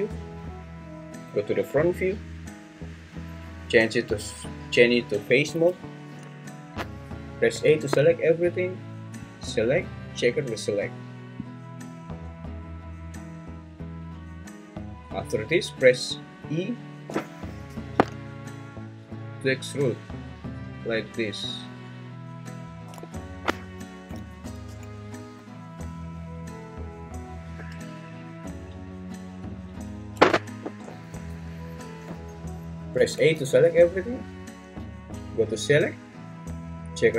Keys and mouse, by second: 1.2 `, 5.8-7.5 drag, 7.5 a, 9.3-11.4 drag, 17.7 e, 23.0 Escape, 24.1 a, 24.4 m, 27.3-30.6 drag, 31.1 `, 32.9 a, 35.6-37.1 drag.